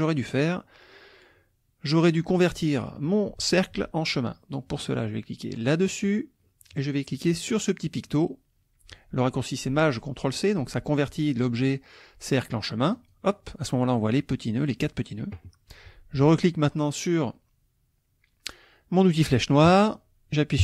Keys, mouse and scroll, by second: 0.4 click, 5.9 click, 13.0 click, 19.7 click.